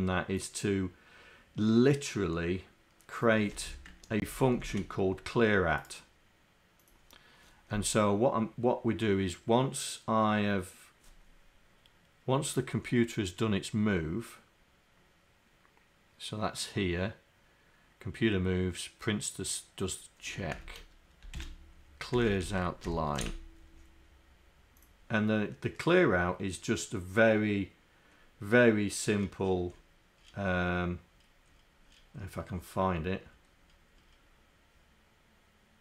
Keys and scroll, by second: 3.5 Home, 4.3 shift+Down, 4.6 shift+Down.